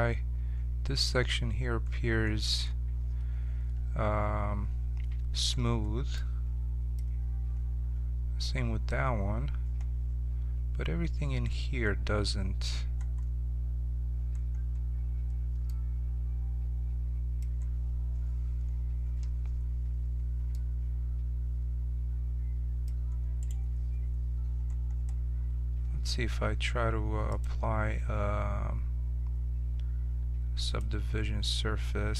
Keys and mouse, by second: 0.2-3.9 middle drag, 23.4-30.8 right drag.